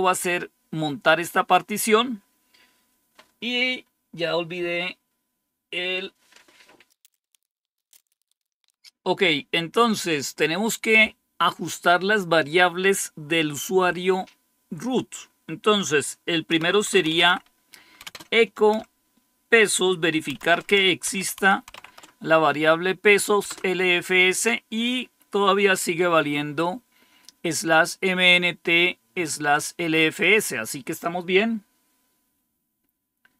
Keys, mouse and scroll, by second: 16.2-17.9 typing, 20.2-22.1 typing, 23.4 Return, 28.2-31.0 drag.